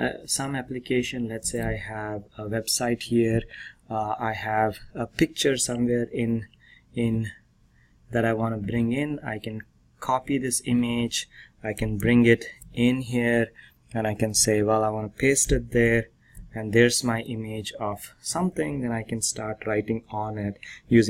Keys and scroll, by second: 12.6 ctrl+alt+b, 15.6 ctrl+v.